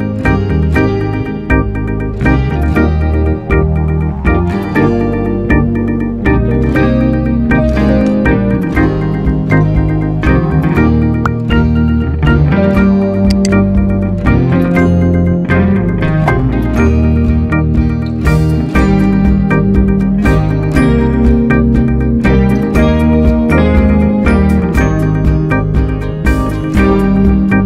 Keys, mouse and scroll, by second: 5.6 KP_3, 6.5 Tab, 9.2-10.3 middle drag, 10.3 Tab, 13.2-15.5 drag, 15.5 ctrl+a, 16.2 right click, 16.9-17.9 middle drag, 17.9 scroll up 2, 18.3-19.0 middle drag, 19.0 click, 20.6 click, 20.9-22.6 middle drag, 22.6 scroll down 1, 22.9-24.2 middle drag, 24.2 click, 25.0 click, 25.4-27.3 middle drag, 27.3 shift+a.